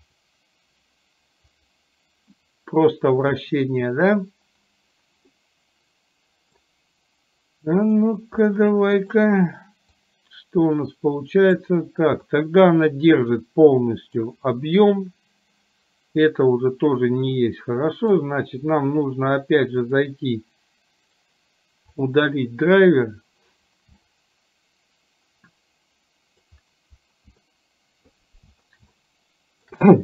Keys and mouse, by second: 5.4-6.7 middle drag, 8.5-9.2 middle drag, 10.0-11.7 drag, 12.4-14.4 middle drag, 16.4-18.3 drag, 19.9 click, 21.2-22.3 right drag, 24.2-26.5 middle drag, 27.5 middle click, 29.0-29.7 shift+middle drag.